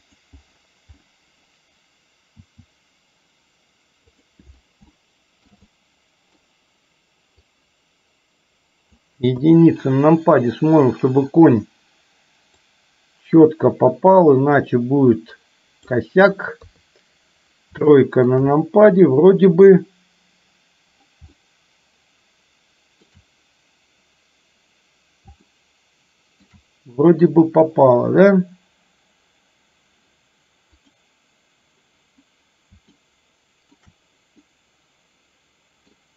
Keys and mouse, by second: 2.5 s, 5.0 shift+middle click, 5.8 middle click, 7.5-9.1 drag, 9.5 KP_1, 13.1-16.1 drag, 16.7 KP_3, 18.0-18.3 shift+middle drag, 21.5-23.2 shift+middle drag, 25.6-26.5 shift+middle drag, 30.8 click, 33.0 shift+middle click, 34.5-36.1 middle drag.